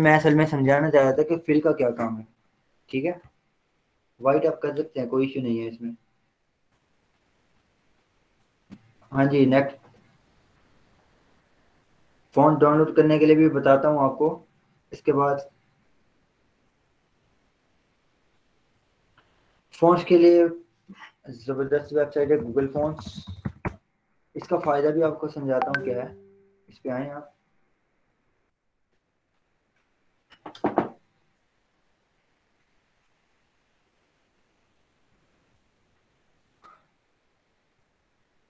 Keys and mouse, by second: 0.9 click, 21.5 click, 22.2 ctrl+t, 23.0-24.7 typing, 24.9 Return, 27.2 click, 32.7 click.